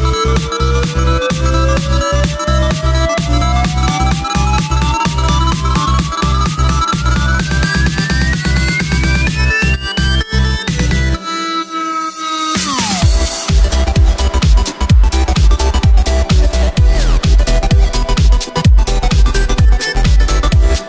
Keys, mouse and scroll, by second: 1.5 g, 3.3 alt+d, 3.8 g, 6.7 right click, 7.0-9.8 middle drag, 9.8 shift+a, 16.2-17.6 scroll down 3, 17.6 r, 20.1-20.8 middle drag.